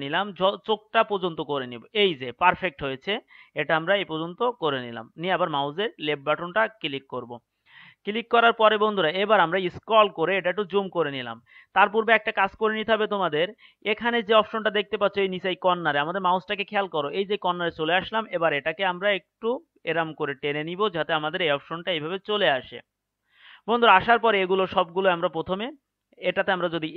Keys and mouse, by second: 10.9-14.3 middle drag, 19.4 click, 19.9 click.